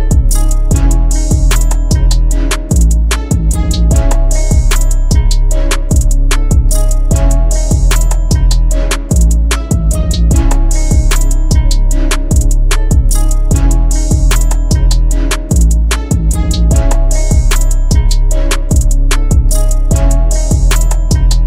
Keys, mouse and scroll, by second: 0.4-1.2 typing, 0.7 double click, 1.5 double click, 4.4 click, 6.9-8.7 typing, 7.3 double click, 9.0 double click, 13.8 right click, 15.0 double click.